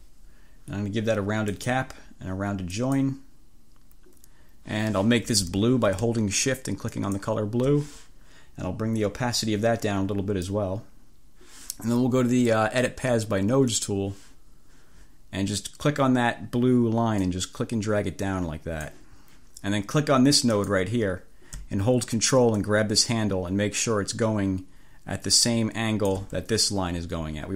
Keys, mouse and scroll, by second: 1.6 click, 2.8 click, 7.0 shift+click, 9.1-10.8 drag, 13.8 click, 17.2-19.1 drag, 20.6 click, 22.6-26.4 drag.